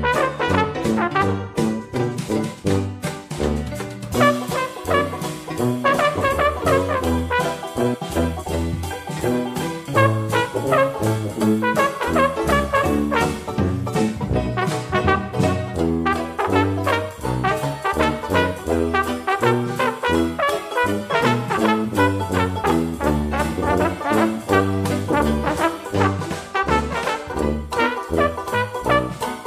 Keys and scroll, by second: 6.8 ctrl+d.